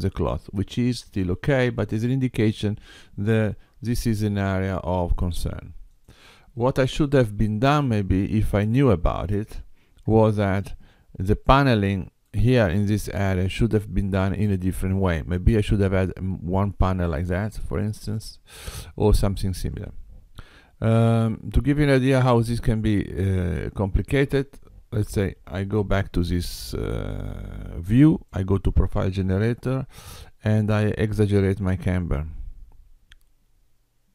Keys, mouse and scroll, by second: 6.0 click, 7.3 x, 9.2 click, 10.1 Tab, 11.5 middle click, 20.5 KP_7, 21.9 middle click, 25.0 Tab, 28.0 click, 31.4 click.